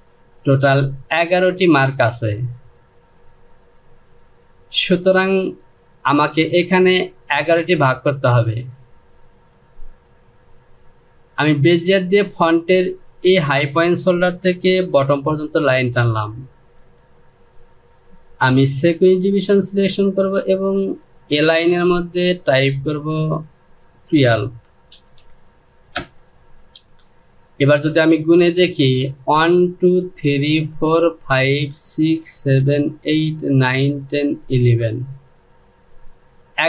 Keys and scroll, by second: 24.6 KP_1, 25.6 Return.